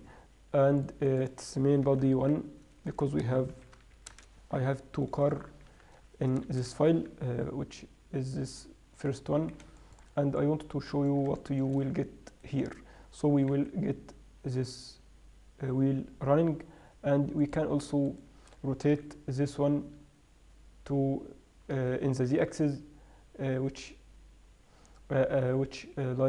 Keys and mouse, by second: 2.4 click, 2.6 BackSpace, 3.3 BackSpace, 7.0 click, 8.9-11.4 middle drag, 12.7-13.7 middle drag, 13.7 g, 14.1-15.1 middle drag, 18.5-20.3 right drag, 19.4 r, 22.7 r.